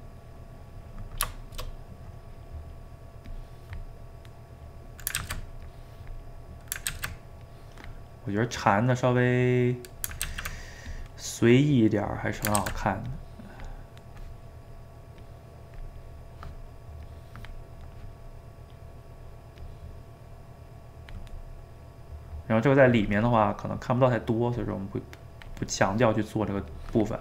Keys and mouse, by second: 0.2-3.3 middle drag, 3.3 click, 4.3 middle click, 5.2 ctrl+z, 5.7-6.9 drag, 6.9 ctrl+z, 7.4 click, 8.3-10.3 middle drag, 10.3 ctrl+z, 10.9-12.6 drag, 12.6 ctrl+z, 13.1 click, 13.9-15.2 middle drag, 15.2 click, 16.0-17.1 middle drag, 17.1-18.1 drag, 18.1-19.6 middle drag, 19.6-21.4 drag, 21.4-24.6 middle drag, 24.6-27.2 drag.